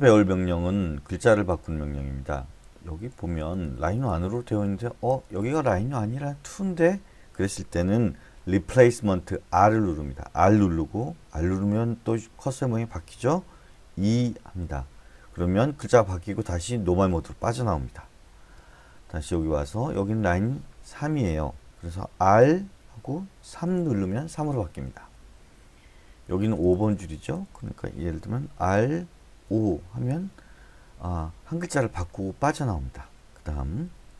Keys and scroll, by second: 3.1 Up, 3.1 Left, 3.4 Left, 3.6 Left, 3.8 Left, 4.1 Left, 4.3 Left, 4.6 Left, 9.5 typing, 14.0 2, 18.1-18.5 typing, 22.4 r, 23.6 3, 25.3-29.4 typing, 33.8-34.1 typing.